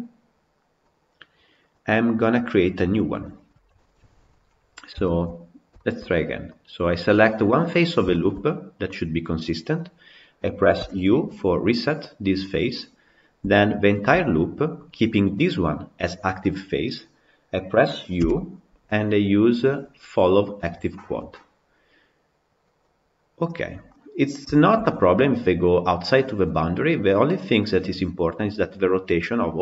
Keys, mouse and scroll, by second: 1.9 click, 4.9-6.3 shift+middle drag, 6.3 click, 8.0-11.9 shift+middle drag, 11.9 u, 13.7 alt+click.